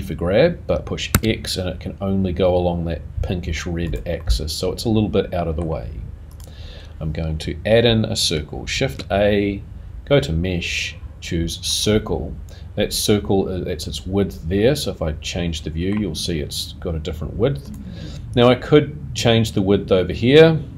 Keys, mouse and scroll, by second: 4.2 middle click, 6.3 click, 7.2-8.3 scroll up 4, 8.7 shift+a, 14.6 middle click, 16.0-17.7 scroll down 1, 17.7 click.